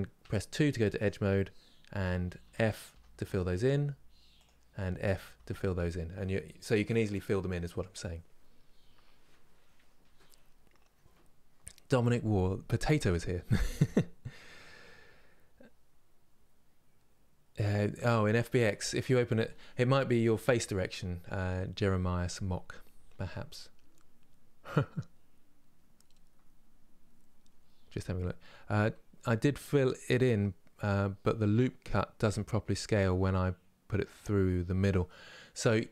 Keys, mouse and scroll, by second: 1.6 f, 2.9-4.1 middle drag, 4.1 click, 4.4 f.